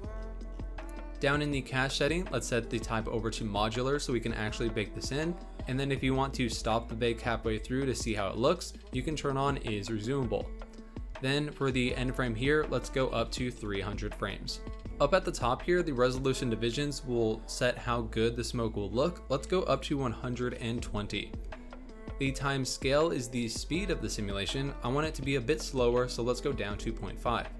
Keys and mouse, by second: 2.7-3.5 drag, 11.2-13.7 drag, 13.1 KP_0, 16.1 click, 22.4-26.1 drag.